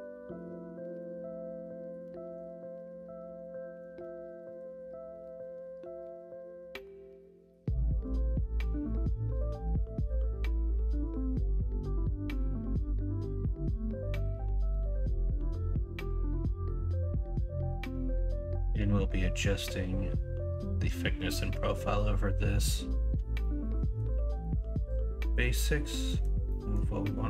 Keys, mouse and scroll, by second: 2.4 click, 3.0 middle click, 3.7 2, 5.1 KP_1, 5.4 KP_3, 8.8 g, 13.1 e, 23.5 middle click, 24.4-25.5 middle drag, 26.1 middle click, 26.4 middle click.